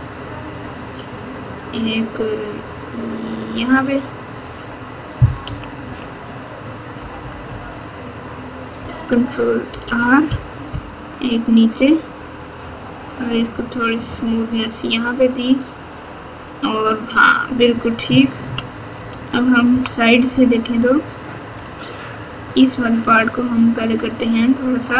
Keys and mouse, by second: 5.4 KP_2, 5.8 KP_2, 6.9 KP_4, 7.1 KP_4, 7.4 KP_8, 9.6 ctrl+r, 18.4 KP_3, 19.6 KP_1, 21.7 alt+z, 22.4 click, 22.7 click, 23.8 click.